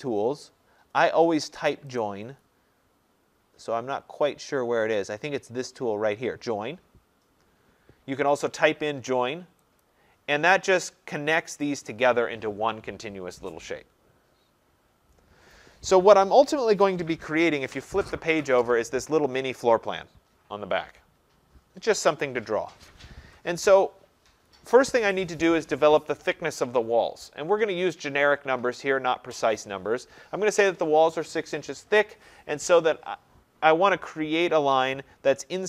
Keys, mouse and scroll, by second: 2.0 click, 9.9 click, 11.6 click.